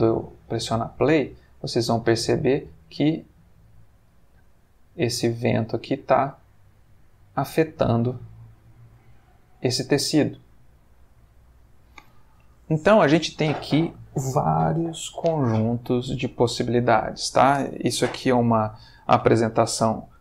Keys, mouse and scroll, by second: 8.3-9.1 middle drag, 11.3-12.1 middle drag.